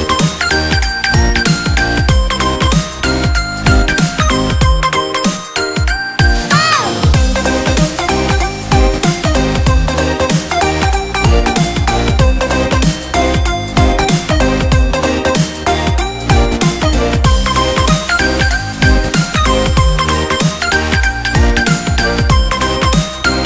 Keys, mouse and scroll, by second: 3.2-3.6 scroll up 1, 3.6-4.8 middle drag, 4.8-7.9 drag, 8.0-9.5 middle drag, 9.5 click, 12.3-15.3 drag, 15.8 click, 21.2-23.1 middle drag, 23.1 click.